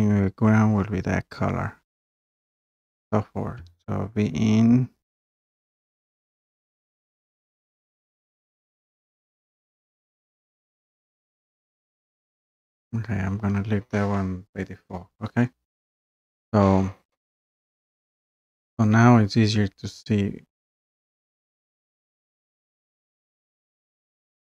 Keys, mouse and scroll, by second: 11.4-12.2 scroll down 1, 14.0-15.1 scroll up 1, 15.1-15.7 scroll up 1, 15.7-16.0 scroll up 1, 16.0-18.2 scroll down 2, 18.2-18.7 scroll up 1, 21.0 scroll down 2, 21.1-21.5 scroll up 1, 22.0 click, 22.1 click, 22.4 click, 22.8 click, 23.1 click, 23.5 click, 23.7 click.